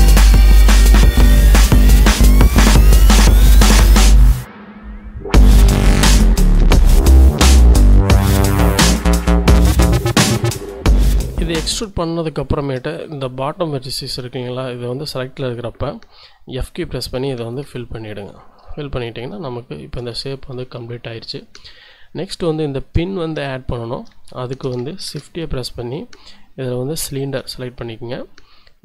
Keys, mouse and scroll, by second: 0.4 click, 1.0 s, 2.4 click, 3.3 middle click, 3.6 s, 6.2 click, 6.9 e, 7.1 s, 8.8 click, 9.3 e, 9.6 s, 10.6 click, 12.0 shift+click, 12.3 shift+middle click, 13.2 middle click, 13.8 scroll up 1, 15.4 z, 16.6 f, 17.2-17.6 scroll up 2, 17.6 z, 18.6 1, 19.6 shift+click, 20.2 shift+z, 20.6 shift+scroll up 2, 21.2 shift+click, 22.6 shift+click, 23.1 shift+scroll up 2, 23.3 shift+z, 23.6-24.1 scroll up 2, 24.2 shift+click, 25.0 shift+a, 27.2 click, 27.8-28.8 scroll down 2.